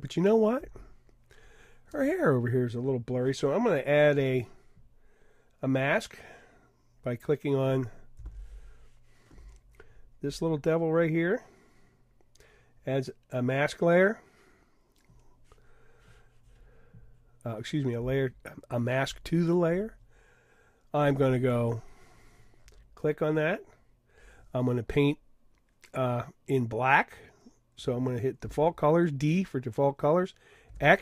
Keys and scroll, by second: 28.4 d, 30.7 x.